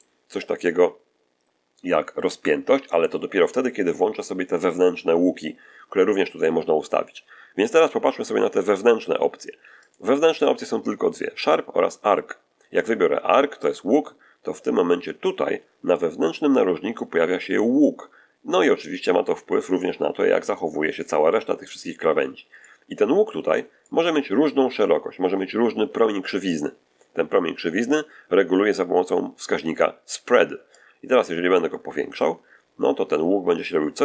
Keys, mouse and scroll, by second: 9.7 click, 13.5 click, 22.4 scroll up 1, 22.5-23.6 middle drag, 23.7 middle click, 30.6-34.0 drag.